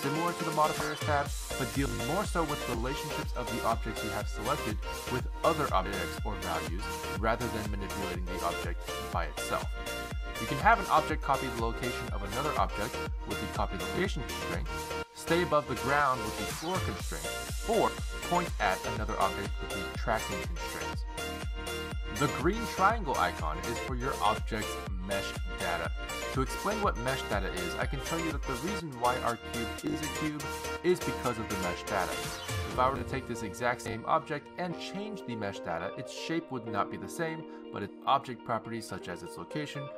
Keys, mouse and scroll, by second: 0.1 click, 2.2 click, 5.1 click, 7.1 click, 11.2 click, 11.7 click, 12.1 click, 13.0 click, 13.9 click, 17.9 click, 18.9 click, 19.5 click, 21.3 click, 23.1 click, 28.6 shift+a, 31.9 g, 33.7 click, 33.7 g, 35.2 click, 38.9 click.